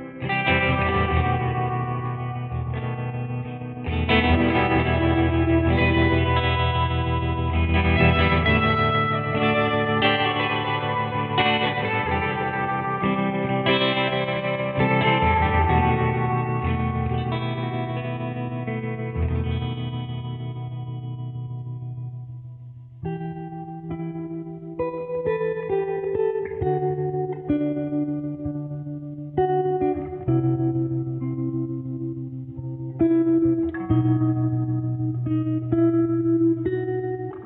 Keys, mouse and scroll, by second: 0.4-13.4 typing, 4.9 Return, 14.6 Return, 17.9-20.2 typing, 21.1-21.4 scroll down 1, 21.8-22.6 scroll up 1, 22.3-24.0 typing, 25.0 /, 25.4 space, 25.9 `, 27.2 Return, 27.3-37.4 typing.